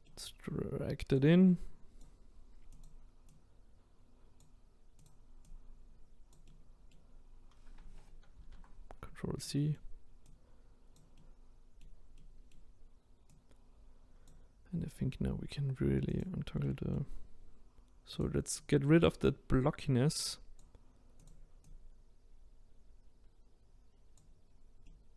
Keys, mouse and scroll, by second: 0.1-1.2 middle drag, 1.2 click, 2.8 click, 5.4 click, 6.4-8.3 middle drag, 8.3 ctrl+z, 9.4 middle click, 10.3 click, 11.2-13.3 middle drag, 13.3 click, 16.1 click, 16.6 middle click, 17.1-18.2 scroll up 2, 18.2 click, 18.6 click, 21.6 click, 24.5-24.8 scroll down 1, 24.8-25.1 middle drag.